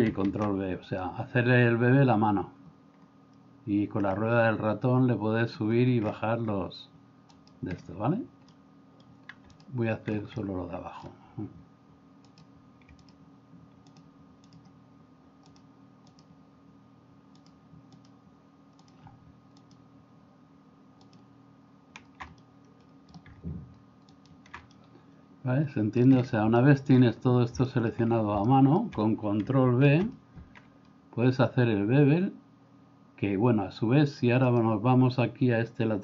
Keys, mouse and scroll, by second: 0.3 ctrl+b, 8.6 middle click, 10.4 middle click, 13.0-22.2 shift+right drag, 22.4 middle click, 24.7-26.0 middle drag, 26.6 shift+middle click, 27.8 middle click, 28.4 middle click, 29.9 ctrl+b.